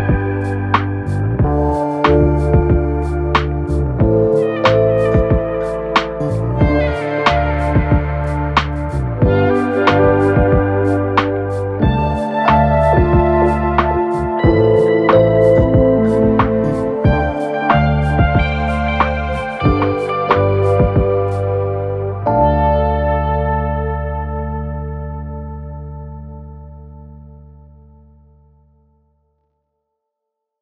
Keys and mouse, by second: 17.3 s, 18.3 middle click, 18.9-24.2 drag, 22.6 s, 24.2-30.6 middle drag, 25.3 s, 26.5-29.2 typing.